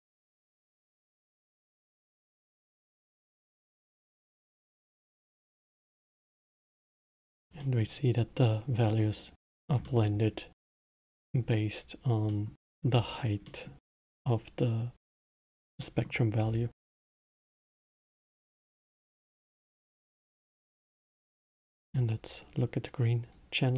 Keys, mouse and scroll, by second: 1.1-1.4 middle drag, 1.4 space, 4.7 space, 4.8-6.1 middle drag, 6.1-6.5 scroll down 2, 6.5-7.0 middle drag, 7.0-7.5 scroll up 2, 7.5-9.5 middle drag, 9.5-9.8 scroll down 1, 9.8-12.8 middle drag, 12.8 scroll up 2, 13.4-16.4 middle drag, 16.4 scroll down 3, 17.2-20.3 middle drag, 20.3 scroll down 2, 21.9-23.7 drag.